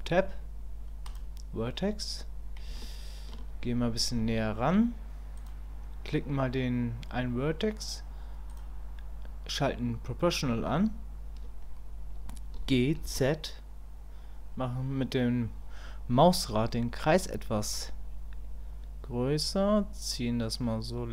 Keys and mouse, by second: 1.1 click, 2.8 shift+click, 4.4 shift+click, 5.4-8.6 drag.